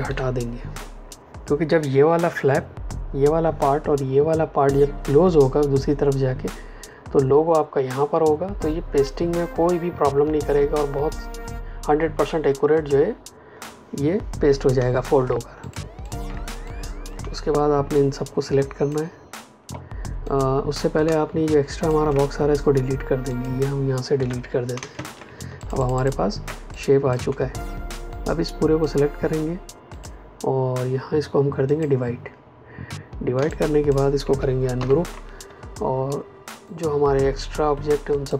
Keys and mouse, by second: 0.0 Delete, 14.7 space, 15.5 ctrl+alt+click, 15.9 ctrl+alt+click, 16.6 click, 21.0 space, 21.4 ctrl+click, 23.2 click, 24.1 Delete, 24.7 space, 25.5 ctrl+alt+click, 26.4 click, 33.3 space, 33.4 click, 33.8 space, 34.7 ctrl+shift+g, 36.6 click.